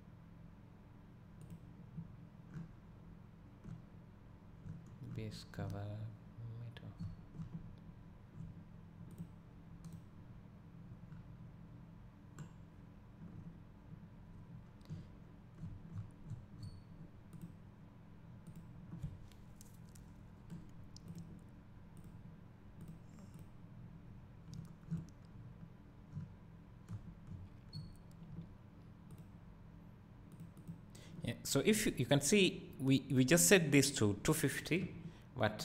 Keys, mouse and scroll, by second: 4.4 scroll up 1, 20.8 click.